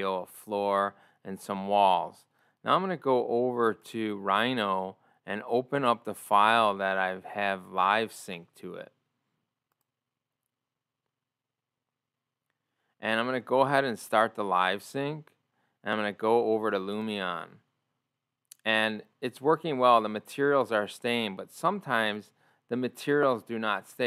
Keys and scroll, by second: 16.9 ctrl+o.